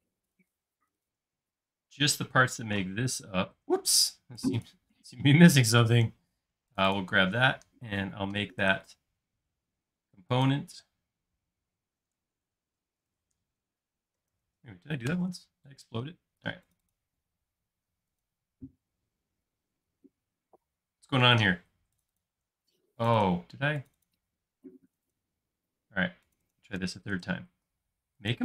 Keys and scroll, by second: 12.3-14.8 typing, 15.1 Return.